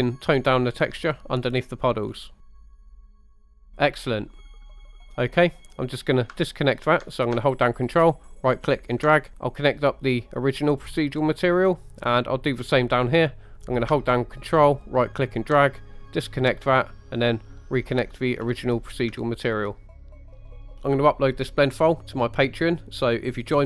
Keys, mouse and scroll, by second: 2.6 middle click, 2.9 middle click, 3.5 middle click, 4.1 middle drag, 4.5 scroll down 2, 4.9 scroll up 2, 5.1 middle click, 5.1 scroll down 1, 7.9 ctrl+right click, 9.3 ctrl+z, 9.3 click, 10.1-11.1 drag, 11.7 middle click, 12.4 middle click, 13.1 scroll up 1, 13.4 middle click, 13.5 click, 14.9 ctrl+right click, 16.7-18.5 drag, 19.9 middle click, 20.2 middle click, 20.4 scroll down 2, 20.6 shift+middle click.